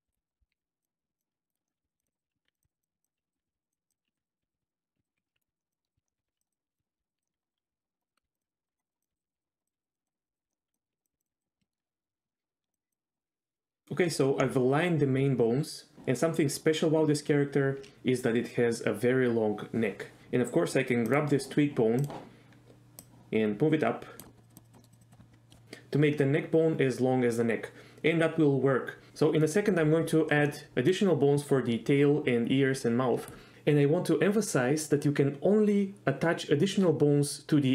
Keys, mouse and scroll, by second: 0.0-11.3 typing, 0.6 click, 0.9 click, 1.3 shift+middle click, 1.9 click, 2.1 click, 2.4 ctrl+click, 2.5 click, 3.0 ctrl+click, 3.1 click, 3.6 click, 3.9 click, 4.1 ctrl+click, 4.4 click, 4.6 click, 4.7 middle drag, 5.1 middle click, 5.3 middle click, 5.6 middle click, 5.8 middle click, 6.0 click, 6.3 right click, 6.4 click, 6.4 middle click, 6.8 click, 6.8 middle click, 7.1 click, 7.2 middle click, 7.4 click, 7.4 middle click, 7.6 right click, 7.8 click, 8.0 click, 8.3 click, 8.6 click, 8.8 click, 9.0 click, 9.2 click, 9.9 click, 10.3 click, 10.5 middle click, 10.7 middle click, 11.4 drag, 11.4 middle click, 11.7 shift+middle drag, 12.2 shift+middle click, 13.1 click, 22.1 click, 23.1-24.2 drag, 24.3 middle click, 24.4 click, 24.6 click, 24.8 middle click, 24.9 click, 25.0 click, 25.3 middle click, 30.7 middle click.